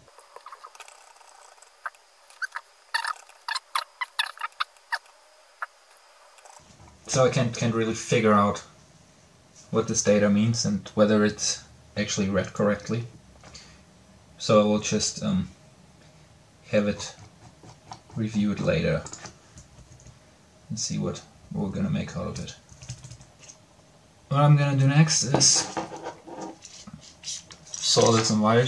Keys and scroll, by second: 0.2 Up, 0.4 Return, 0.5 Up, 0.6 Return, 19.4 Down, 20.0-21.4 Down, 21.8 Down, 22.2-23.7 typing.